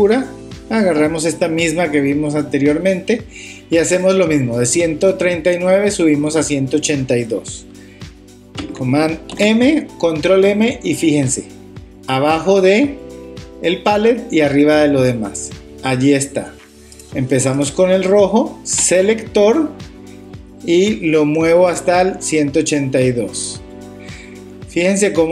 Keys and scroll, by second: 9.3 super+m.